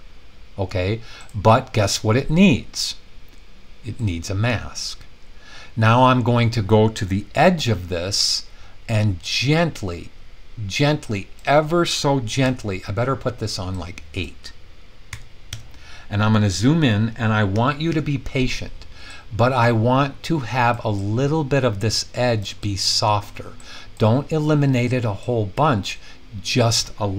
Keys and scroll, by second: 12.4 super+z, 15.1 8, 15.4 Return, 17.5 [, 17.8 [.